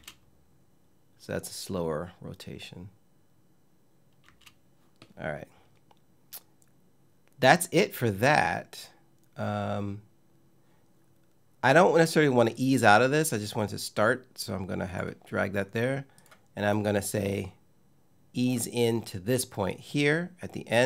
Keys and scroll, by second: 3.9 space.